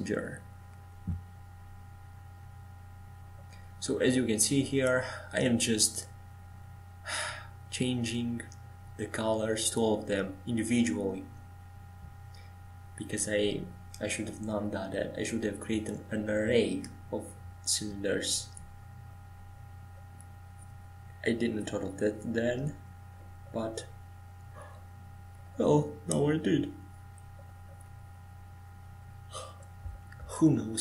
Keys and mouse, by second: 13.6-14.7 middle drag, 14.7-24.7 drag, 14.7-16.0 right drag, 24.7-30.8 right drag.